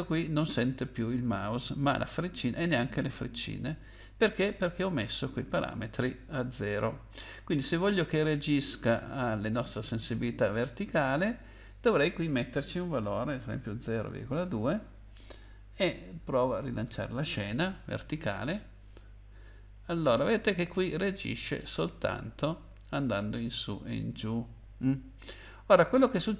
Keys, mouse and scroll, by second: 1.9 Left, 2.3 Left, 2.4 Left, 2.8 Right, 3.0 Right, 3.2 Right, 3.5 Left, 3.9 Right, 5.5 click, 6.8-7.4 scroll up 8, 11.5 click, 13.0-14.7 typing, 16.6 click.